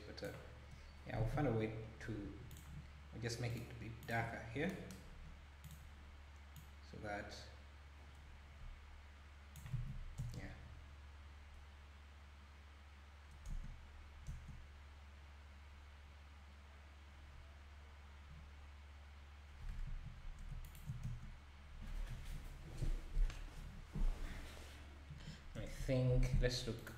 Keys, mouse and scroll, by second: 0.8-1.3 scroll down 2, 1.3 alt+a, 1.6-2.5 scroll up 1, 2.5 click, 3.5-4.5 drag, 4.5 scroll down 4, 5.1-5.6 scroll up 3, 5.6 click, 10.2 space, 13.5 space, 14.3 space, 18.6-19.9 scroll down 2, 19.9 Escape, 20.7 shift+right click, 21.0 space, 25.6 space.